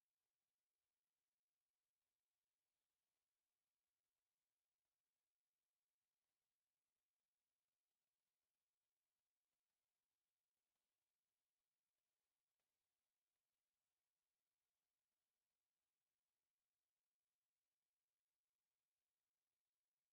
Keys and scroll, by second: 1.8 Return, 4.1 1, 4.4 0, 4.6 Return, 5.9 Escape, 6.4 m, 7.5 Escape, 9.0 space, 10.6 F8, 12.7 e, 12.8 space, 14.2 e, 14.3 space, 15.1 c, 15.6 space, 19.2 Escape.